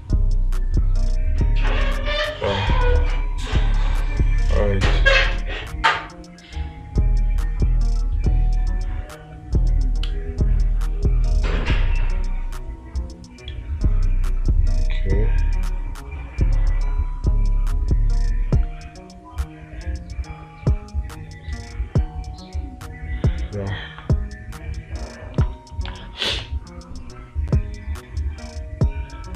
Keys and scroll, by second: 26.3 space.